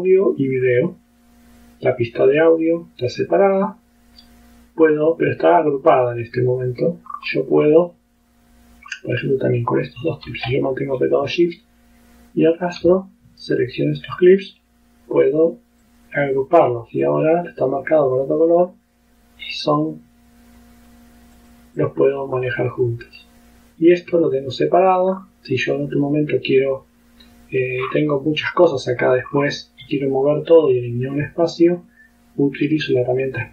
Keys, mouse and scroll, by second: 0.4-1.8 drag, 5.5-7.0 drag, 7.2-7.5 scroll up 1, 9.0 scroll up 1, 11.4-12.9 shift+drag, 14.6 right click, 15.9 click, 16.4 click, 17.1-21.2 drag, 21.4 click, 21.8 click, 24.0 click, 25.2-25.5 scroll down 2, 27.9-28.2 scroll down 2, 29.4-29.7 scroll up 2, 31.8 click, 33.0-33.5 drag.